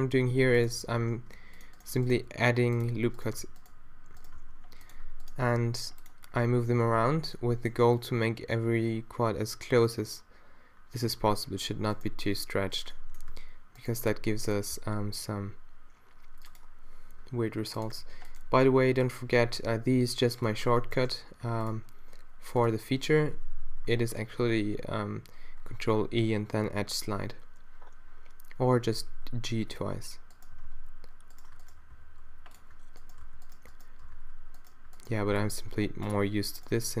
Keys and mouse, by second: 1.2 ctrl+r, 2.3 d, 3.4 d, 4.4 d, 6.1 d, 6.2-8.6 middle drag, 7.0 a, 10.2-11.9 middle drag, 12.1 alt+d, 13.3 s, 14.1 s, 14.8 d, 16.5-17.9 middle drag, 17.3 d, 18.0 ctrl+r, 20.7 click, 21.3 ctrl+r, 24.2 ctrl+e, 28.9 g, 30.6 g, 32.0 d, 33.3-37.0 drag, 33.3 d, 34.1 d, 35.3 d.